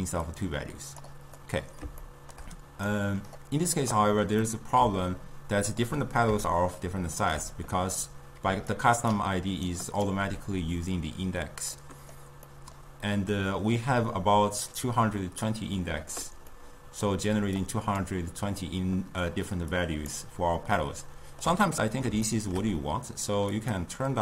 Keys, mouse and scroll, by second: 0.3-1.4 drag, 1.4-2.9 middle drag, 2.9-4.5 drag, 4.5-8.6 middle drag, 8.6 d, 8.8 click, 9.2-9.5 d, 9.7 right click, 10.2 d, 11.8-15.7 middle drag, 16.6-17.7 middle drag, 17.7-20.8 drag, 20.8-23.6 middle drag, 23.6-24.2 drag.